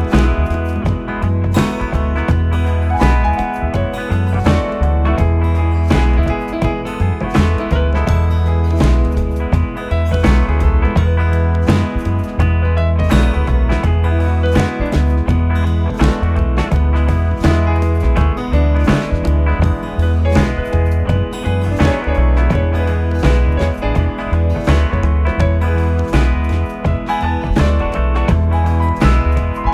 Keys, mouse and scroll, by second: 0.8 s, 3.7 e, 8.3 s, 10.7 r, 13.8 g, 18.4 s, 22.8 e, 27.1 s.